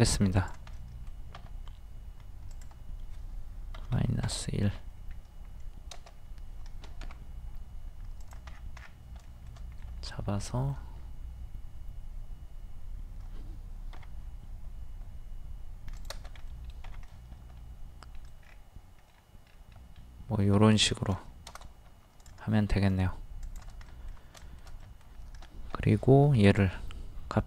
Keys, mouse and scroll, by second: 0.7 middle click, 1.4 typing, 2.5 click, 3.9 KP_1, 5.1-5.4 scroll up 1, 7.1 m, 8.2 click, 8.5-9.2 scroll down 1, 9.2 shift+scroll down 1, 10.5 shift+middle click, 11.0-12.3 scroll up 1, 13.9 k, 16.0 click, 16.5 middle click, 18.4-18.7 scroll down 1, 19.5-20.6 middle drag, 20.6-21.1 scroll down 1, 21.2 shift+middle click, 21.6 space, 22.3 click, 23.4 shift+click, 23.9 middle click, 24.8 middle click, 26.4 ctrl+click.